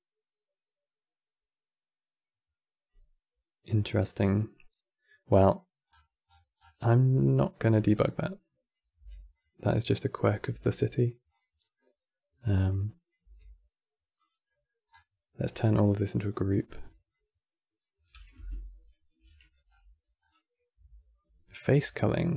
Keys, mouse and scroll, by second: 5.7-6.4 scroll down 20, 6.5-7.8 middle drag, 7.8 click, 8.7 g, 9.6 drag, 10.2 g, 11.3-12.4 middle drag, 12.4 click, 12.9 g, 14.2 middle click, 14.6 scroll down 6, 15.2 click, 16.8 shift+click, 19.0-19.4 middle drag, 19.4-20.1 scroll up 11.